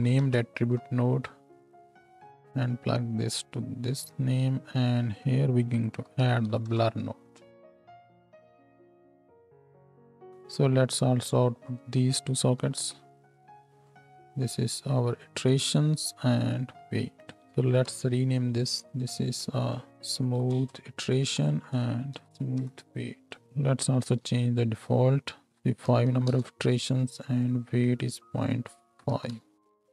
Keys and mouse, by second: 2.2 click, 2.7-11.9 middle drag, 11.9-13.8 ctrl+drag, 12.6 ctrl+h, 13.8 middle click, 14.0 click, 14.3-17.0 middle drag, 17.0-19.0 ctrl+drag, 17.4 ctrl+h, 17.8 n, 20.0 o, 22.3 o, 23.4 Tab, 23.4-25.5 drag, 24.2 n, 25.5 middle click, 27.4 click, 29.5 Tab, 29.5 click, 29.5 n.